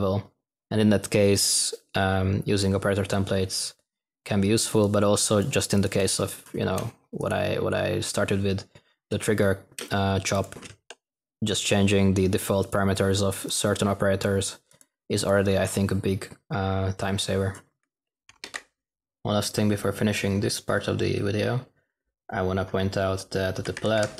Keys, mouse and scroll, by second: 23.6-24.0 typing.